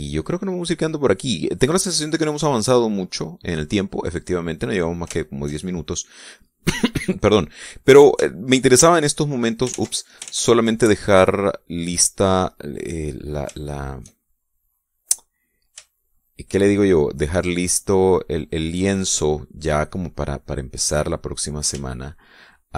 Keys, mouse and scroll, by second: 0.6 click, 1.8-2.8 middle drag, 3.8 click, 4.6 click, 5.2 middle click, 6.1 shift+middle click, 6.8-7.5 shift+middle drag, 8.0-9.7 middle drag, 10.0 shift+click, 10.8 ctrl+z, 14.7 shift+click, 15.8-16.8 shift+drag, 16.9 shift+click, 16.9 shift+middle click, 17.4 shift+click, 17.4 shift+middle click, 17.8 shift+click, 17.9 shift+middle click, 19.3 shift+click, 20.1-22.7 shift+middle drag.